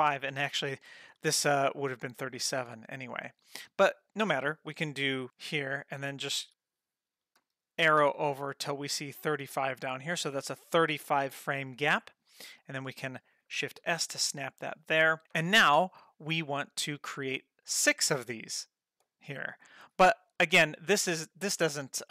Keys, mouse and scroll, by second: 1.6 click, 3.5 click, 5.2 click, 7.4 Left, 7.8 Left, 12.6 click, 13.8 shift+s, 21.8 click.